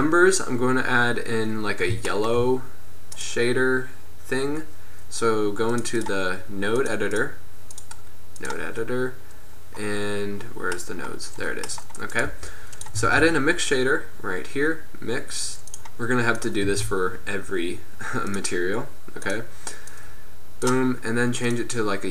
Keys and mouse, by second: 1.5-2.5 middle drag, 3.2-5.2 drag, 9.4-12.3 drag, 12.3-14.0 right drag, 12.4 g, 13.1 shift+a, 16.7 shift+a, 20.1-22.1 drag.